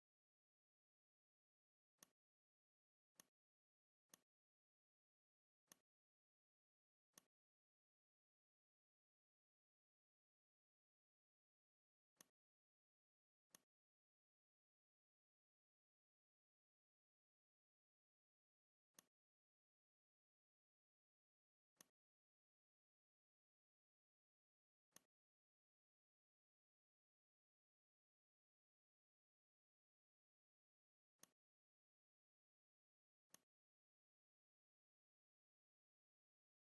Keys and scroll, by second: 0.2 v, 1.7 space, 6.8 r, 11.5 v, 18.7 r, 20.9 v, 21.6 space, 24.1 r, 29.6 v, 30.7 r, 32.3 v.